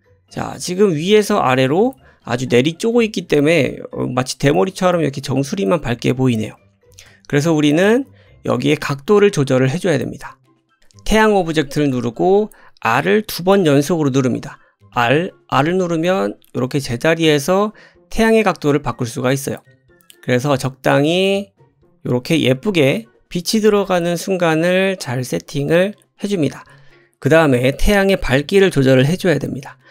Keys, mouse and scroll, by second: 0.0 middle click, 0.0 click, 0.5 click, 0.6-11.9 middle drag, 9.9-10.4 scroll down 2, 10.8 click, 11.9 click, 12.0-29.9 middle drag, 14.9 r, 23.6 r.